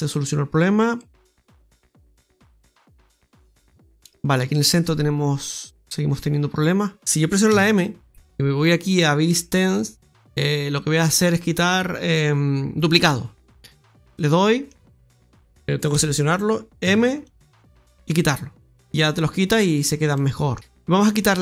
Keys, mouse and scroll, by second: 0.0 click, 1.5 middle click, 1.5-2.4 scroll up 1, 3.1 Tab, 3.5 Tab, 5.5 click, 7.0 middle click, 7.0-7.4 scroll up 2, 7.4 m, 14.0 middle click, 15.8 a, 16.7 m, 19.1-19.7 scroll up 1, 19.7 right click, 20.0 middle click, 20.5 middle click, 20.5-21.0 scroll up 3.